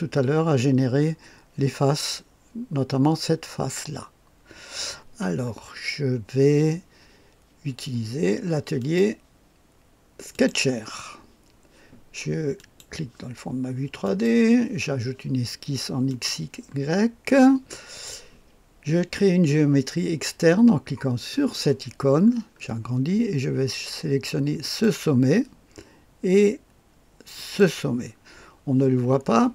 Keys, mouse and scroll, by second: 8.7 click, 10.3 click, 12.5 click, 14.0 click, 16.0 click, 21.3 click, 24.6 click, 27.3 click.